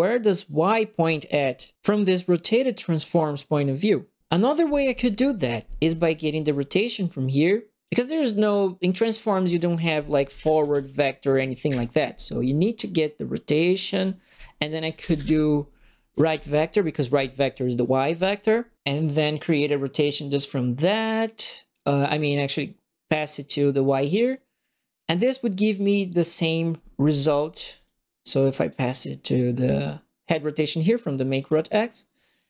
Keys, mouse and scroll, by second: 6.9 click, 8.7 click, 9.9-11.1 typing, 11.6 Escape, 13.3 click, 14.5-15.5 typing, 16.2 Return, 17.9 click, 20.1-23.3 drag, 24.2 click, 25.6 click, 27.8 click, 31.3 click.